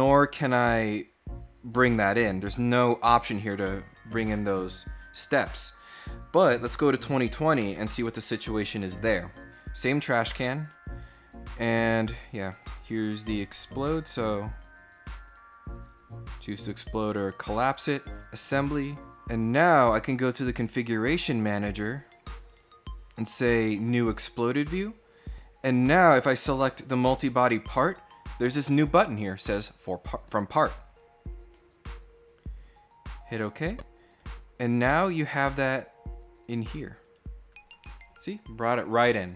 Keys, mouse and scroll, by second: 3.4 click, 4.0 click, 7.4 alt+Tab, 10.1 click, 12.1 click, 12.9 click, 13.5 right click, 14.4 click, 15.0 right click, 15.6 click, 18.0 click, 19.5 click, 20.4 right click, 22.3 right click, 23.2 click, 26.0 click, 30.7 click, 33.0 click, 34.0 click, 34.5 right click, 36.1 click, 36.8 right click, 37.3 click.